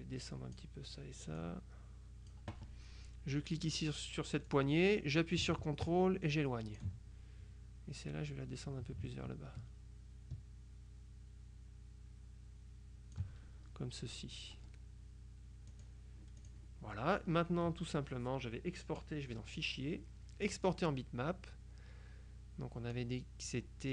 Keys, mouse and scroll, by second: 1.5-2.9 drag, 4.6-7.4 drag, 8.1-13.7 drag, 15.8 click, 16.5 click, 18.9 click, 20.5 click, 23.0 click.